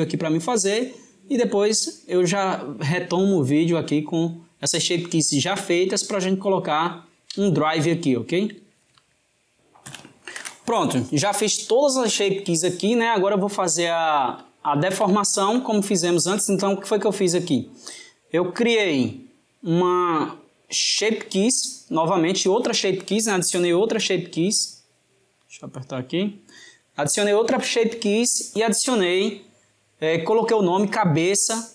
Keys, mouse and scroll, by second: 13.2-18.1 shift+middle drag, 18.5 click, 19.5-21.9 drag, 24.4 click, 25.2-28.2 middle drag.